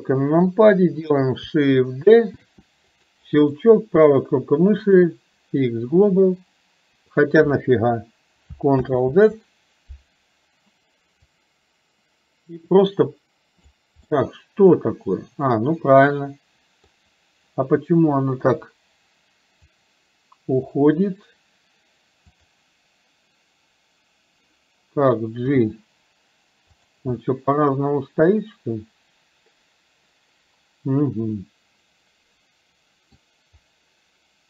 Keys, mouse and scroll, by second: 2.4 shift+d, 11.3-13.7 drag, 14.2-16.9 middle drag, 18.5 KP_7, 19.8-20.8 drag, 22.3 click, 27.4-33.3 middle drag.